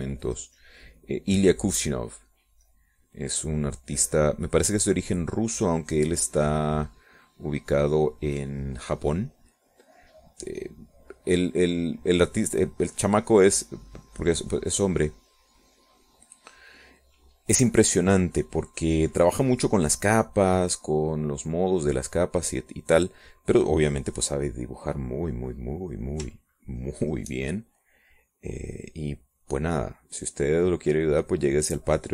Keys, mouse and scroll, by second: 8.1-18.6 drag, 19.2-25.0 drag, 25.3-26.5 middle drag, 27.7 shift+click, 28.4 shift+click, 28.8-32.1 shift+drag.